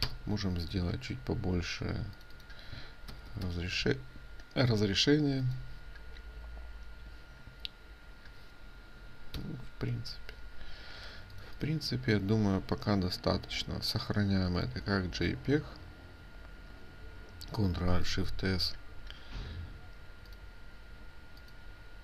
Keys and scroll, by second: 0.4 ctrl+alt+i, 9.4 ctrl+0, 11.1 ctrl+space, 11.1 ctrl+0, 14.6 ctrl+alt+shift+s.